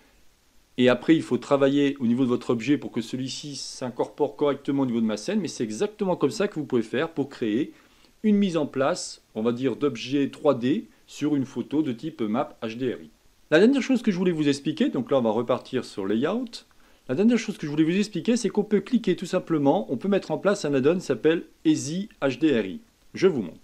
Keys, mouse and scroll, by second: 0.7-1.1 scroll up 2, 1.9 scroll down 1, 15.9 click, 17.4-20.5 middle drag.